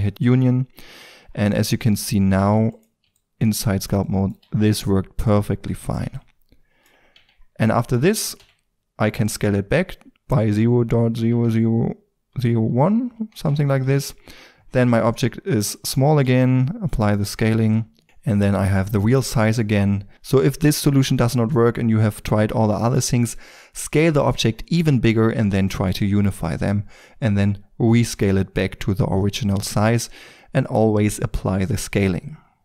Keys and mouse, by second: 0.8 Tab, 2.4 ctrl+d, 4.5-7.1 middle drag, 7.1 Tab, 8.4 s, 13.9 KP_Decimal, 14.7-15.8 middle drag, 15.8 click, 16.1 ctrl+a.